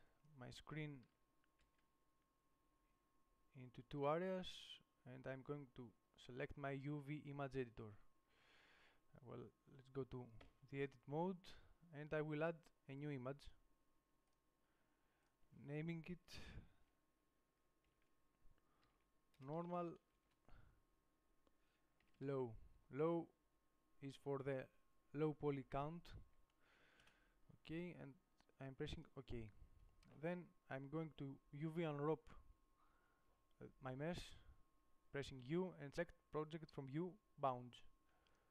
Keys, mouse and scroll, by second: 10.6 Tab.